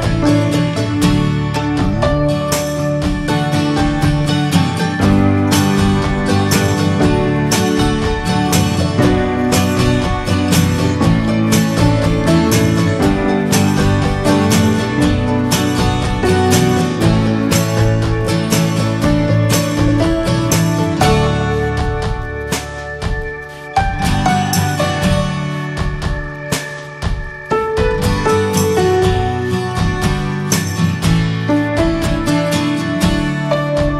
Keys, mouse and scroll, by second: 0.1-0.6 scroll up 2, 0.4 middle click, 1.2-2.3 drag, 2.3-4.0 middle drag, 4.0-6.2 drag, 6.5-7.7 drag, 7.7-8.7 middle drag, 8.7-10.6 drag, 10.9-11.2 scroll down 2, 11.2-11.8 middle drag, 11.8-12.3 scroll up 3, 12.1 shift+middle click, 13.1-14.5 middle drag, 14.5-16.2 drag, 16.6-17.5 middle drag, 17.5 s, 18.2-18.9 scroll down 3, 18.4 alt+middle click, 18.9-19.5 shift+middle drag, 19.5-19.9 scroll up 4, 20.0-20.9 shift+middle drag, 20.9 e, 22.1 e, 23.3 click, 23.5-23.9 alt+shift+drag, 23.9 middle drag, 24.2 e, 24.5 alt+s, 26.2-27.0 middle drag, 27.0 2, 27.1 drag, 27.7 alt+shift+drag, 28.0-28.5 middle drag, 28.5 ctrl+b, 31.2 Tab, 31.3 click, 31.4-32.1 scroll down 7, 31.7 shift+middle drag, 32.3-33.0 alt+middle drag, 33.0 ctrl+s, 33.3 scroll up 1, 33.5-33.9 shift+middle drag.